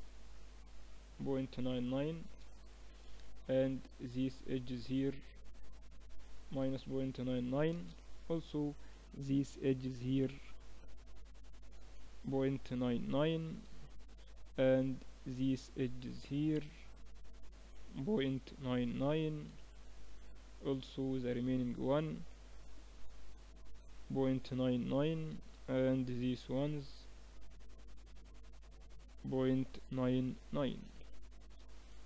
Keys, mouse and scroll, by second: 3.2 ctrl+r, 8.4 ctrl+r, 14.4 ctrl+r, 19.6-23.8 middle drag, 20.6 ctrl+r, 25.8 ctrl+r.